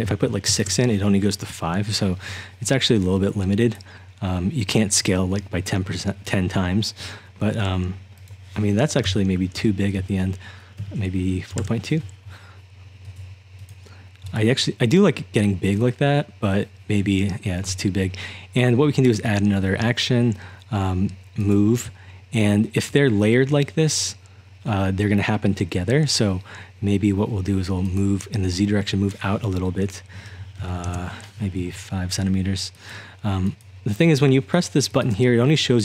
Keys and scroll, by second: 0.0 6, 0.5 Return, 9.1-11.6 typing, 30.6 5, 30.9 Return.